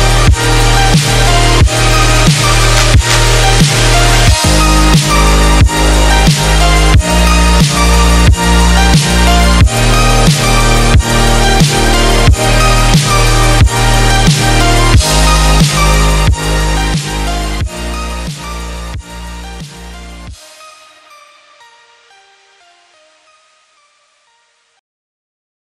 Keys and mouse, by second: 7.3 click, 9.8-24.7 drag.